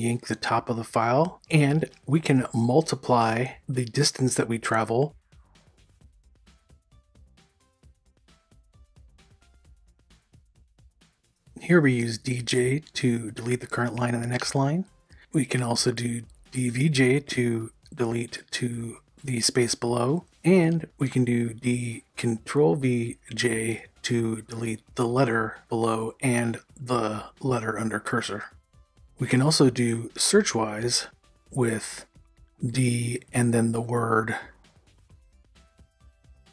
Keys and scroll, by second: 0.0-2.8 typing, 4.7-9.5 typing, 11.4-12.4 typing, 14.4 u, 16.4-17.5 typing, 19.1 u, 22.7-23.9 typing, 26.0 u, 33.6-36.0 typing.